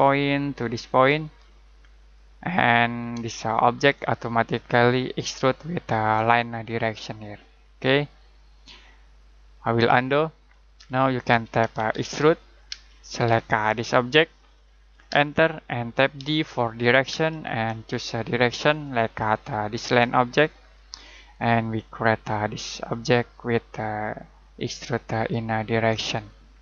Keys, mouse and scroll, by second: 3.3 ctrl+middle click, 5.5 ctrl+shift+middle click, 8.3 ctrl+scroll down 1, 8.7 ctrl+middle click, 9.9-11.6 typing, 12.8 space, 13.3 click, 15.1 space, 16.2 d, 17.1 space, 18.7 click, 21.5 middle click, 26.3-26.6 scroll down 1.